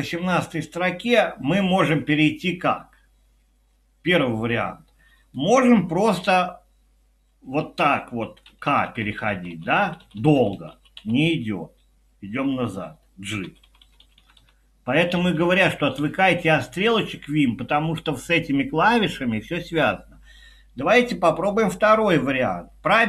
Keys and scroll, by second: 7.3 typing, 8.4-11.5 typing, 13.2-14.0 typing.